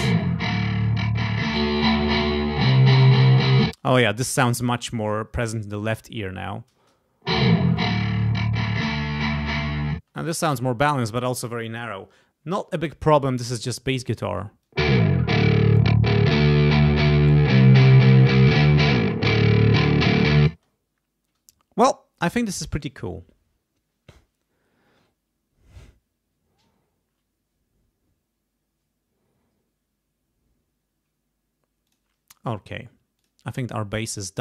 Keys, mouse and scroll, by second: 0.2-2.0 drag, 3.6 space, 6.7 space, 7.6-8.9 drag, 9.9 space, 13.4 click, 14.2 space, 14.6-16.1 drag, 17.3-18.7 drag, 19.8 click, 20.5 space, 31.8 click, 33.1 click.